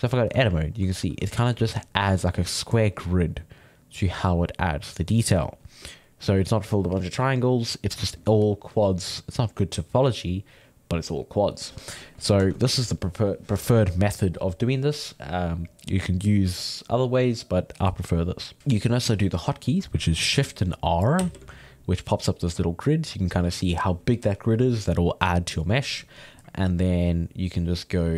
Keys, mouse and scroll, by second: 1.3-9.6 ctrl+shift+middle drag, 12.4 ctrl+Tab, 18.6-20.8 ctrl+middle drag, 21.1 shift+r.